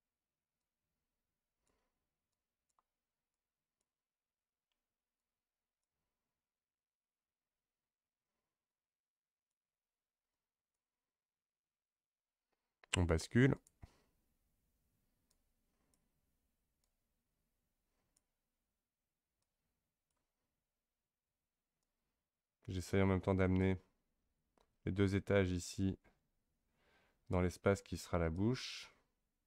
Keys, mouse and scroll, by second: 0.6-8.2 drag, 8.7-13.3 drag, 13.5 click, 15.3-24.9 drag, 28.3-29.4 drag.